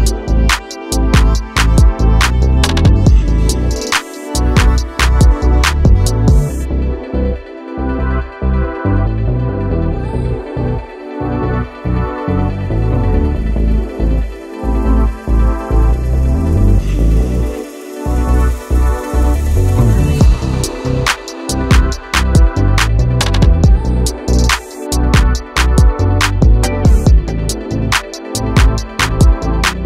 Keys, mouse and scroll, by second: 0.7 Tab, 1.6 click, 4.5 click, 8.4-10.0 drag, 10.0-10.7 scroll up 3, 11.7 scroll down 1, 13.1 alt+e, 22.6-23.3 scroll down 3, 23.3 Tab, 24.3 click, 24.9 click, 25.3-28.4 middle drag.